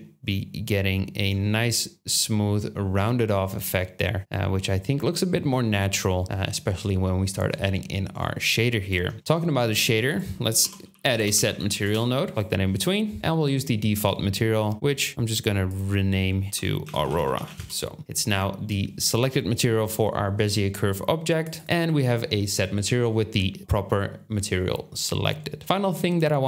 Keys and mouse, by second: 9.8 shift+a, 14.9 click, 18.9-21.4 middle drag, 21.6 middle drag.